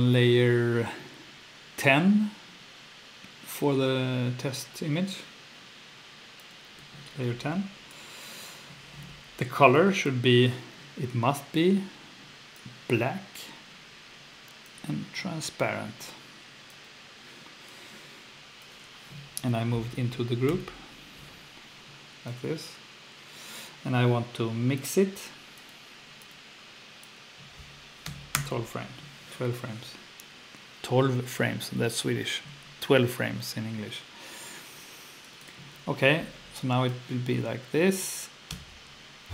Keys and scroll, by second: 20.5 super+Right, 28.1 2, 28.3 Return, 38.5 F2.